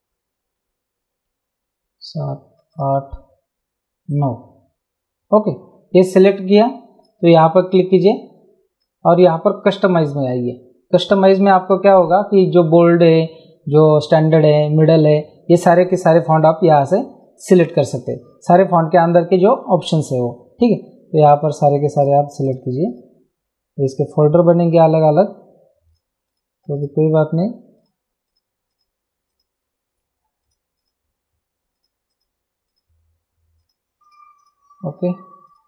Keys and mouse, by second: 2.7 click, 4.1 click, 7.3 click, 9.6 click, 21.3 click, 24.7 click, 25.9 click, 30.5 click, 35.5 click.